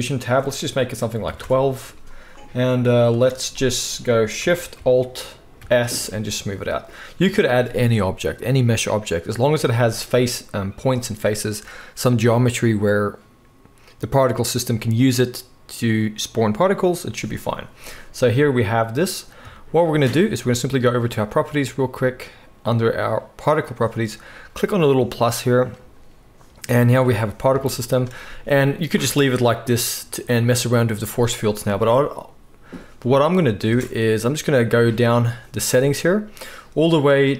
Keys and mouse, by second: 5.6 alt+shift+s, 6.9-16.7 drag, 7.2 Tab, 16.7-21.2 right drag, 21.2 middle click, 21.3 right click, 24.7-28.2 middle drag, 28.2 space, 33.6 space.